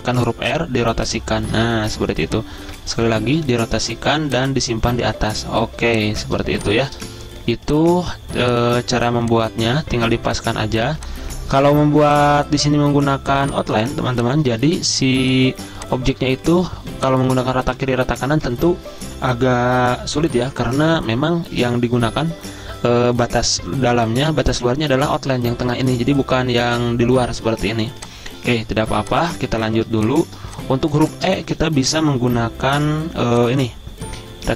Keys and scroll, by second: 1.8 ctrl+z, 3.8 v, 5.8-7.5 typing, 10.9 z, 14.5 a, 16.8 z, 17.7 v, 28.9 z, 31.6 m.